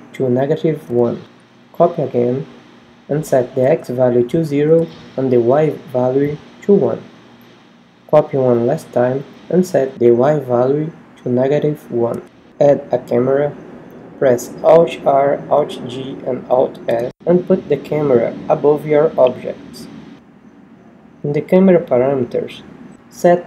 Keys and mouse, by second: 13.0 middle click, 14.3 shift+a, 18.2 KP_1, 21.0 alt+r, 21.9 alt+g, 22.6 alt+s.